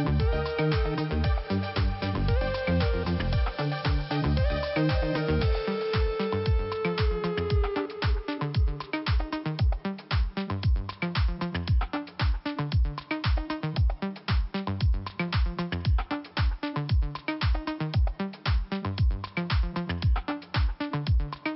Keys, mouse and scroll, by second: 1.8-3.0 scroll down 2, 4.2 scroll up 2, 6.8 click, 9.1 click, 10.4 click, 11.2 click, 12.3 click, 12.4 click, 13.1 click, 14.8 click, 15.9 click, 17.4 click, 20.4-20.9 scroll up 1, 21.3 click, 21.4 click.